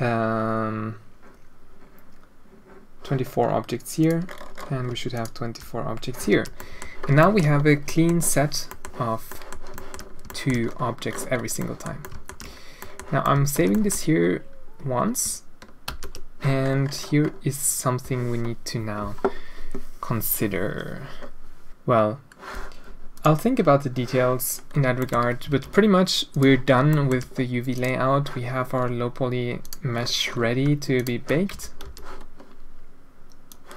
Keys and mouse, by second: 5.1 shift+click, 6.2 alt+a, 6.5 middle drag, 7.1 shift+middle drag, 7.9 middle drag, 8.6 middle click, 9.2 middle drag, 9.7 shift+middle click, 10.2 shift+middle drag, 11.5 middle drag, 12.1 alt+shift+middle click, 12.7 middle drag, 13.2-13.5 alt+shift+middle drag, 13.7 shift+middle drag, 15.8 ctrl+s, 24.9 middle click, 25.5 alt+a, 26.8 shift+middle drag, 27.7 click, 29.5 click, 30.9 shift+click, 31.5 Tab, 31.8 a, 33.4 click.